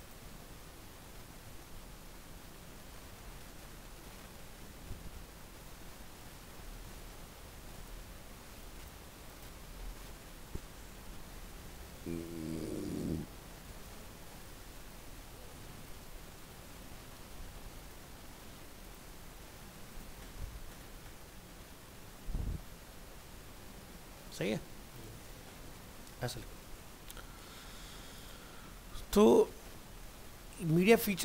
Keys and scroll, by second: 0.4 ctrl+s, 0.8 alt+Tab, 9.7 alt+Tab, 16.2 ctrl+x, 21.6 ctrl+s, 22.0 alt+Tab.